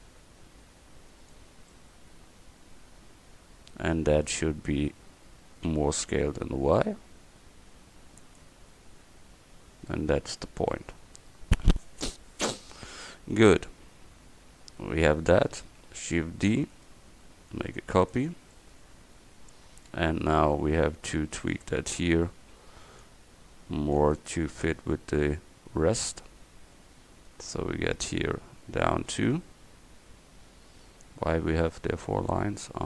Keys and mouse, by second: 1.9 middle click, 5.7 s, 14.9 Tab, 16.6 shift+d, 19.8 Tab, 22.1 a, 22.5 c, 31.2-32.8 middle drag.